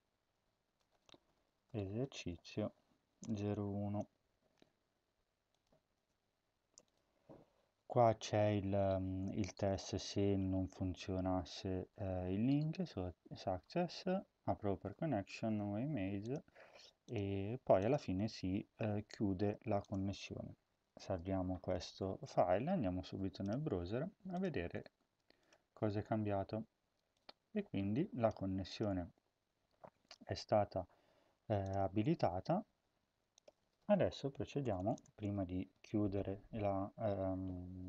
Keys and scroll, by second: 1.0-3.7 typing, 5.9 Return, 20.9 ctrl+s, 34.6 Return, 34.7 Return, 35.7 Up, 36.2 Up, 36.5 Tab.